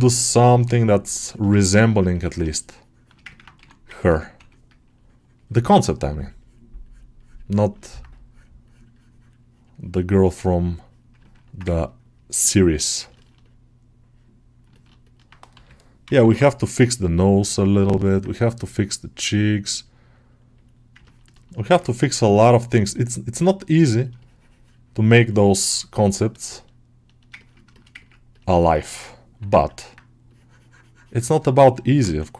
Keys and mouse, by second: 1.1 ctrl+alt+shift+middle click, 1.8 ctrl+alt+middle click, 3.2 ctrl+middle click, 3.8 ctrl+alt+middle click, 4.2 1, 6.0 ctrl+click, 7.7 ctrl+middle click, 9.6 middle click, 9.9-11.2 middle drag, 11.9 ctrl+right click, 13.0-14.5 ctrl+alt+middle drag, 14.6 ctrl+alt+middle click, 15.9 ], 16.1 ], 16.7-17.9 drag, 17.9 alt+middle click, 18.6 click, 19.7-20.9 drag, 20.9 ctrl+middle click, 21.3 middle click, 21.6-23.5 ctrl+middle drag, 23.5-26.3 drag, 26.3 middle click, 27.3 ctrl+middle click, 27.6 alt+shift+middle click, 27.9 ctrl+middle click, 28.2 alt+middle click, 28.5 alt+shift+middle click, 28.7 alt+middle click, 29.7 middle click, 31.8 alt+middle click.